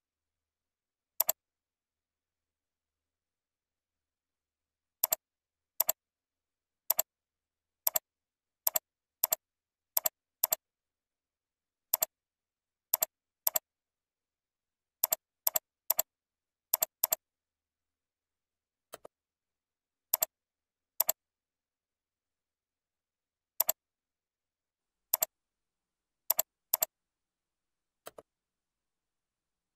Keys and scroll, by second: 14.6 ctrl+e, 24.6 ctrl+e.